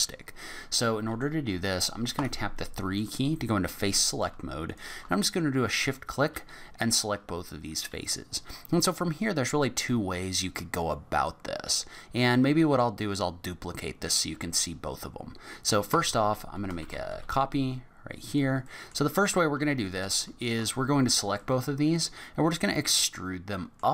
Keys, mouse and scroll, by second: 0.9 middle click, 2.1 3, 3.0 click, 3.5 middle click, 4.7 shift+click, 5.3 middle click, 11.1-11.7 scroll down 8, 11.9-12.4 scroll up 3, 12.3 middle click, 15.9 a, 16.8 shift+d, 18.6 middle click, 19.2 click, 19.6 middle click, 20.4 shift+click, 20.8 scroll up 4, 21.4 middle click, 22.4-23.0 scroll up 1, 23.0 middle click.